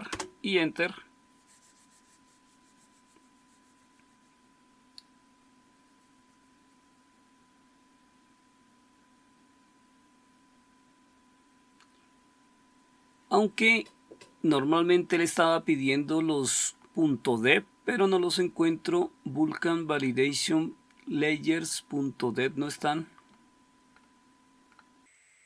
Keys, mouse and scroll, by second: 0.1 Return, 20.6-25.4 scroll up 1.